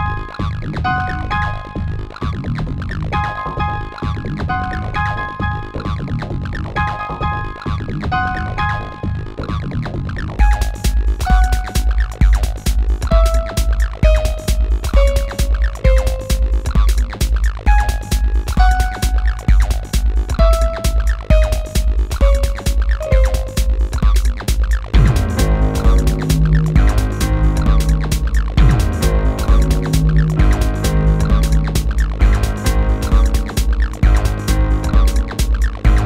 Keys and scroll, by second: 6.1 space, 22.4 q.